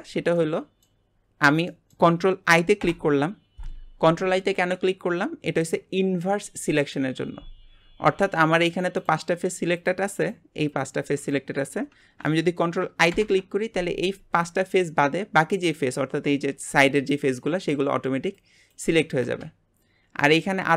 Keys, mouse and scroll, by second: 0.0-0.3 scroll down 2, 0.3 shift+middle click, 1.1-1.7 scroll down 1, 1.7-2.8 shift+middle drag, 2.8 ctrl+i, 4.9-5.4 scroll up 3, 7.7-8.2 scroll up 3, 8.2 scroll down 4, 9.0 click, 10.2 shift+click, 10.7 shift+click, 11.2 shift+click, 13.1 ctrl+i, 15.0-15.5 scroll up 7, 19.5-20.0 scroll down 8, 20.2 shift+middle click, 20.6 scroll up 3.